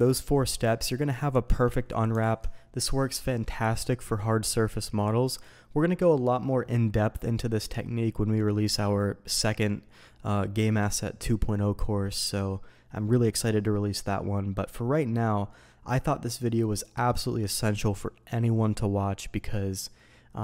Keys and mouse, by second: 0.9 middle click, 1.4 Tab, 2.2 alt+a.